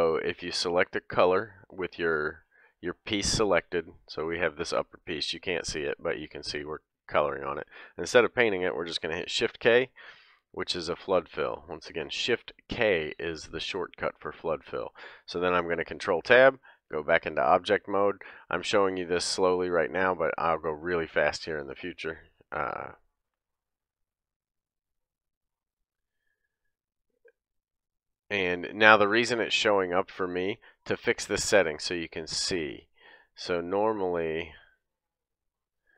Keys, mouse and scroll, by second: 5.3-25.8 drag, 7.5 ctrl+z, 9.3 shift+k, 9.9 middle click, 15.9 ctrl+Tab, 21.2 middle click, 25.8-27.3 middle drag, 27.3 click, 27.4-29.8 middle drag, 29.8 click, 29.9-31.4 middle drag, 31.4-35.9 drag.